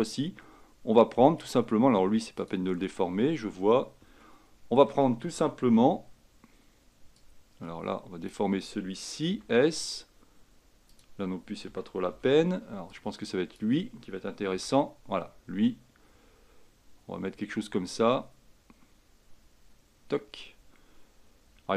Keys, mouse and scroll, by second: 4.3-5.5 shift+middle drag, 5.5 a, 5.9 b, 9.4 s, 11.8 a, 12.2 b, 14.6 s.